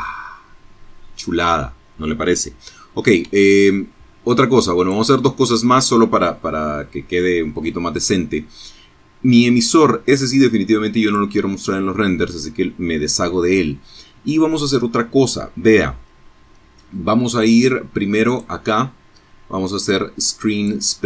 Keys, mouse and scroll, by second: 1.2 Escape, 2.8 click, 9.0 click, 16.3 click, 18.5 click, 20.6 click.